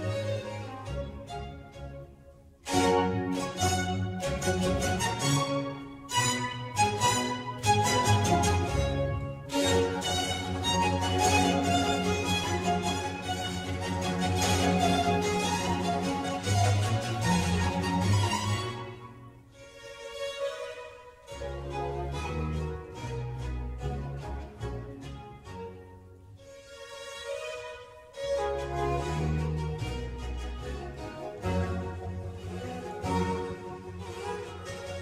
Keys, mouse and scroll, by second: 0.0 click, 0.5 drag, 0.8 click, 1.5-2.3 middle drag, 2.3 Tab, 4.5 e, 8.5 middle click, 9.1 Tab, 9.7 Tab, 10.2 3, 10.4 click, 10.9-12.8 middle drag, 12.8 e, 22.2 click, 22.5-23.8 middle drag, 23.8 Tab, 24.3 g, 25.2 Tab, 25.7 4, 26.1 middle click, 26.8 click, 28.0-29.5 shift+middle drag, 29.5 e, 34.1-35.0 middle drag.